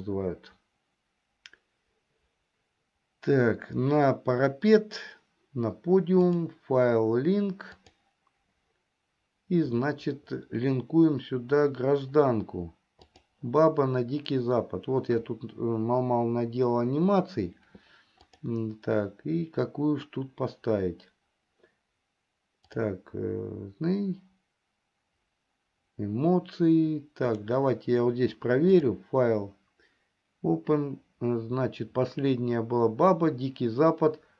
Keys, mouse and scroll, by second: 0.8-5.3 middle drag, 6.6-8.6 drag, 29.4-34.3 drag.